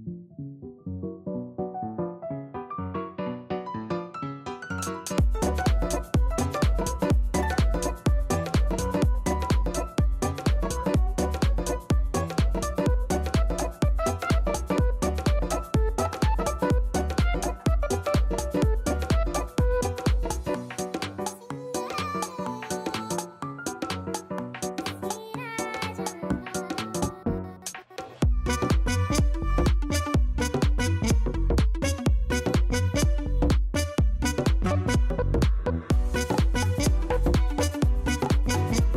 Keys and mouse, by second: 7.5 click, 9.4 KP_Subtract, 10.1 KP_2, 10.3 Return, 14.2 click, 14.9 click, 17.7 click, 18.5 click, 21.5 click, 23.0 click, 23.4 click, 25.1 click, 34.1-37.2 right drag, 37.2 click, 38.0 click.